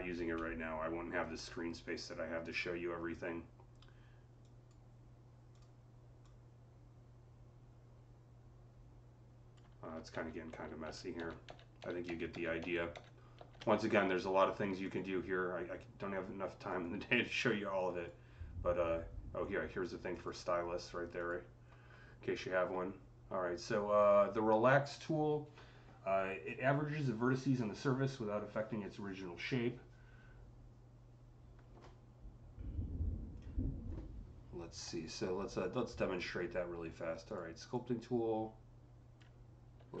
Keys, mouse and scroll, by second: 5.4-10.7 drag, 10.0 ctrl+z, 10.4 ctrl+z, 10.7-12.2 ctrl+z, 12.8 ctrl+z, 14.7 click, 16.6 click, 17.6 click, 20.0 click, 37.1 click, 37.1 typing, 37.6-40.0 drag, 39.6 ctrl+z.